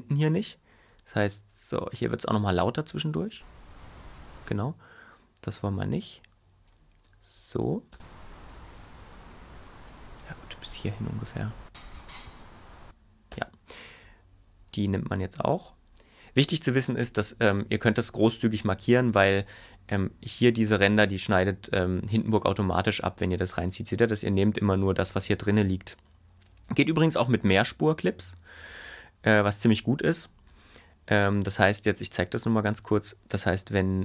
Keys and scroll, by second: 3.3 space, 7.9 space, 13.3 space.